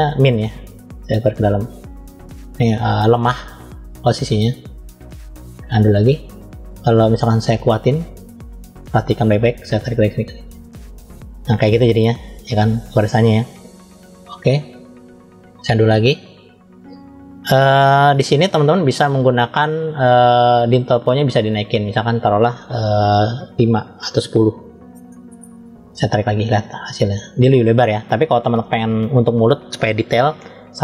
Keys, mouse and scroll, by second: 0.9 click, 3.5-4.6 drag, 5.0 click, 7.6 click, 9.8 click, 14.7 click, 15.9 click, 20.5-25.5 drag, 26.3 click.